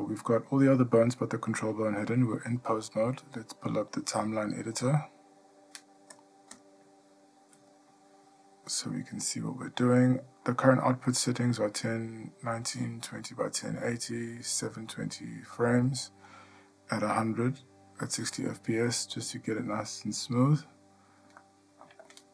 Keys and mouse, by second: 5.8-22.3 drag.